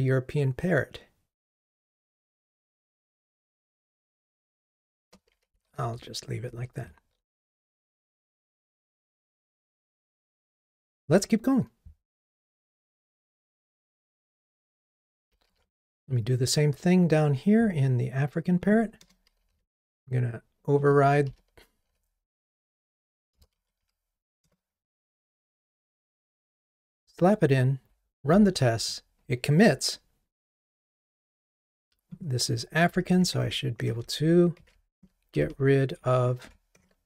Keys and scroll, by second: 3.3 ctrl+shift+j, 5.5 super+z, 14.8 alt+Up, 15.5 alt+Up, 15.5 super+c, 19.6 super+v, 24.5 Return, 25.7 ctrl+r, 33.3 super+BackSpace.